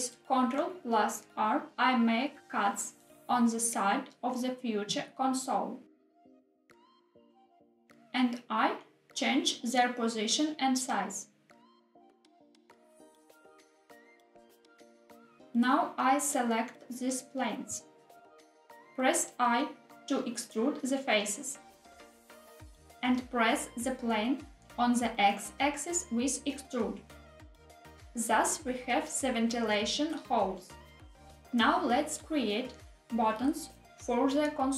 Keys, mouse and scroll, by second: 0.6-0.9 drag, 0.9 s, 1.1 y, 2.7 click, 3.0 ctrl+r, 6.9 click, 7.8 middle click, 7.8 scroll down 1, 8.8 s, 9.1 z, 11.2 click, 11.5 g, 11.8 z, 14.6 click, 15.4 3, 16.1 click, 17.4 shift+click, 18.1 click, 19.1 i, 22.3 click, 22.7 middle click, 22.9 e, 23.9 x, 28.2 click, 32.4 Tab, 34.2-34.7 middle drag.